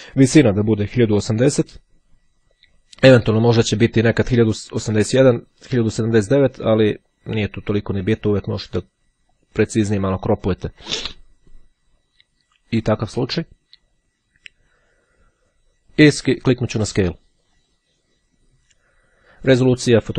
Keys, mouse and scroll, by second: 13.4 click, 16.6-18.2 drag.